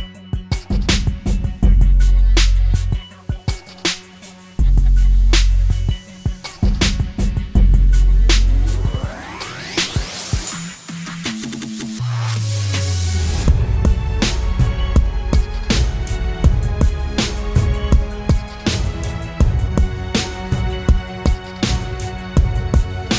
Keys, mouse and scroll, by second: 3.9-5.8 typing, 14.9 typing.